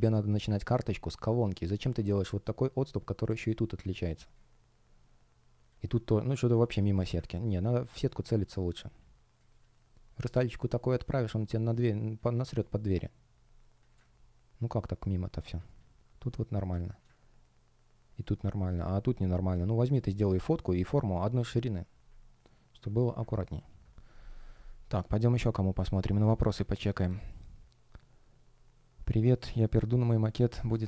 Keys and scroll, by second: 7.7 space, 23.4 super+w.